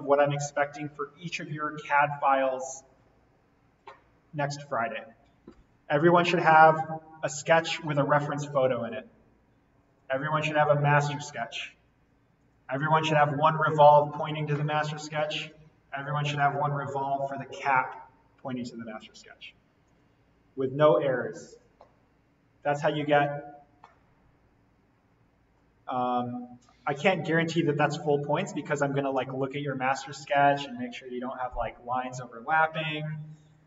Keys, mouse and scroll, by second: 5.1-5.7 scroll down 1, 5.7-6.0 scroll up 1, 6.7 click, 10.0 click, 12.4 click, 19.8 click.